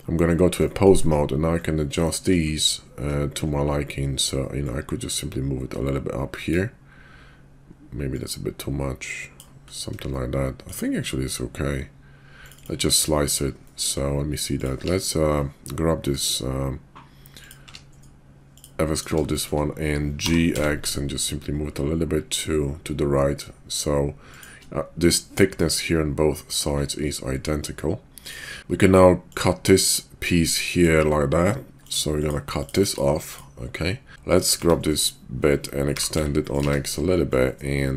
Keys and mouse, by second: 0.7 shift+click, 10.1-10.7 shift+drag, 12.6 click, 13.6 shift+middle drag, 14.5 click, 14.8 q, 17.6 q, 19.3 shift+drag, 20.1 g, 29.3-30.8 drag, 34.1 Tab, 34.3 click, 34.5 Tab, 34.9 click, 35.9 g, 36.6 Tab, 37.3-37.9 drag.